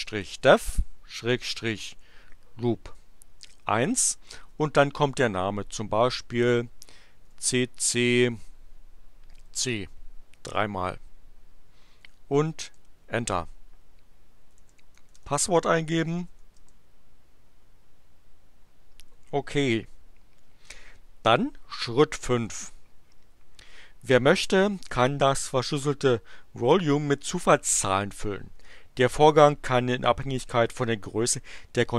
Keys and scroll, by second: 0.0-2.3 typing, 3.7 1, 4.3 space, 7.3 c, 9.3 c, 12.6 Return, 14.3-16.8 typing.